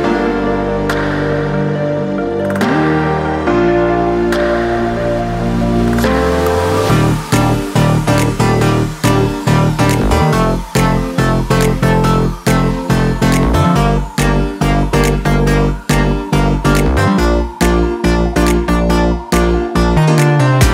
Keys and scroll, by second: 15.1 ctrl+d.